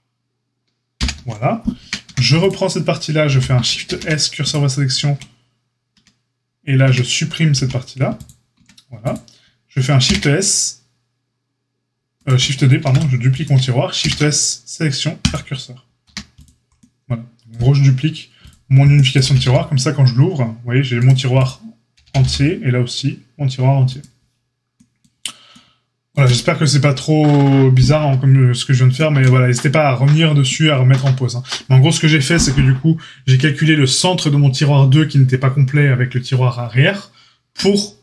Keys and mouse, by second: 0.9 ctrl+j, 1.7 Tab, 2.0 a, 3.2 l, 3.8 shift+s, 5.9 Tab, 6.8 Tab, 7.5 x, 8.5 Tab, 9.0 click, 9.1-38.0 middle drag, 10.0 shift+s, 12.8 shift+d, 13.9 shift+s, 16.0 a, 19.2 g, 22.0 g.